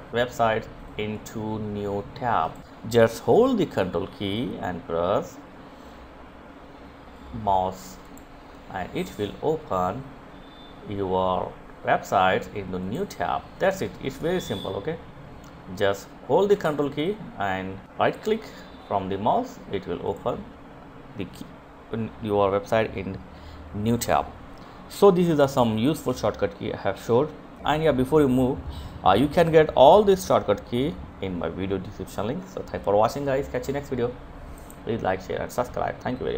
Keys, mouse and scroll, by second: 0.1 right click, 0.3 click, 1.4 right click, 6.0 ctrl+click, 10.7 click, 17.6 ctrl+click, 18.0 click.